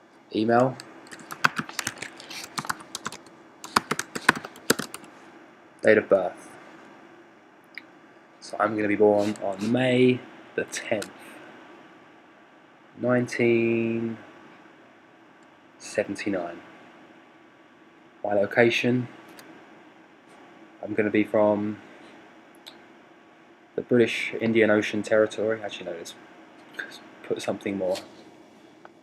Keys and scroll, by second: 0.5-5.0 typing.